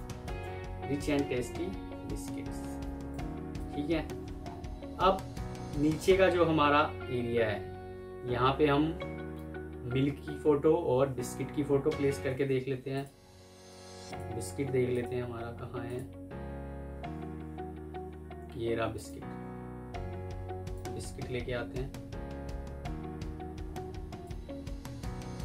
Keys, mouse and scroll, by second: 0.3 Escape, 2.6 F2, 3.6 Escape, 4.3-4.7 alt+scroll up 1, 4.7 alt+scroll down 1, 12.2 alt+Tab.